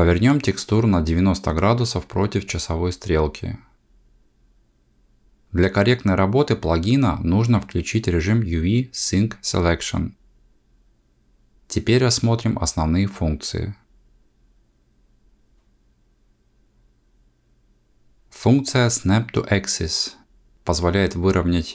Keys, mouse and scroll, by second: 3.9 r, 11.1 click.